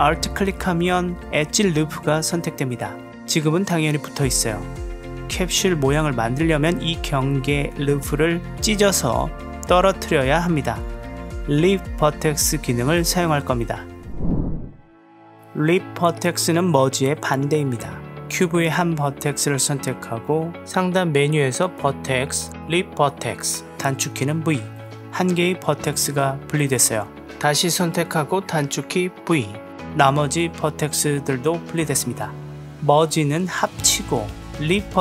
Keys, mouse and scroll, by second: 1.1-1.7 middle drag, 2.8-3.4 alt+drag, 3.4-6.0 middle drag, 6.3 g, 9.2 g, 11.3-14.3 drag, 15.0-15.5 drag, 16.3 Tab, 17.9 click, 18.4 g, 21.1-25.7 drag, 26.2 g, 27.0 g, 31.7 g, 32.8 click, 33.2 m.